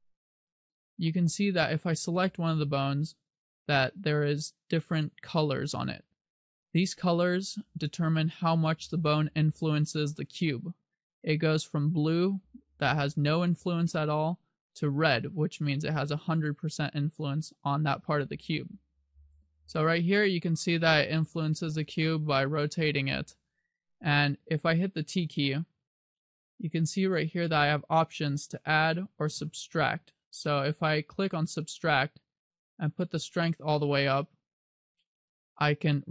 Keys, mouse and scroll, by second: 2.7 right click, 3.6 right click, 7.6 right click, 19.8 r, 23.8 right click, 25.0 t, 27.4 click, 32.9 click, 35.5 click.